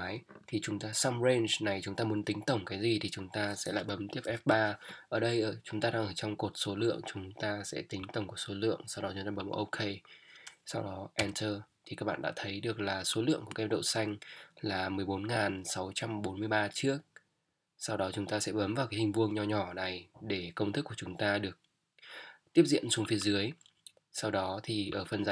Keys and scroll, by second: 4.2 F3, 11.2 Return.